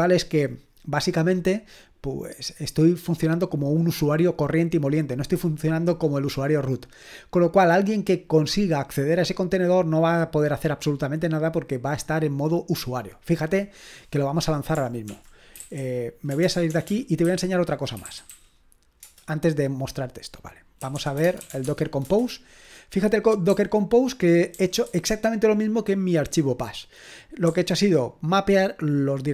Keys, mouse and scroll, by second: 14.8-18.8 typing, 19.0 Return, 20.5-22.0 typing, 22.0 Return, 24.2-24.8 typing.